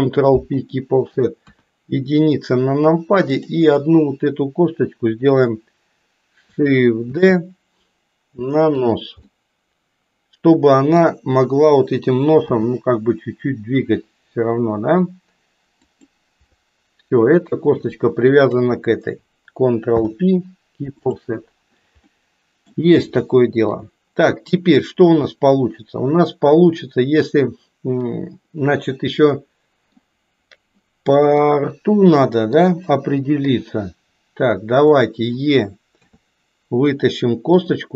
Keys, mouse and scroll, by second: 1.5 KP_1, 3.2 click, 7.2 shift+d, 9.3-11.1 middle drag, 12.5 g, 18.2 shift+click, 19.8 ctrl+p, 22.1 middle click, 23.3 shift+middle click, 25.3-30.0 middle drag, 31.3-32.6 middle drag, 33.5 KP_3, 34.8 click, 36.0 e.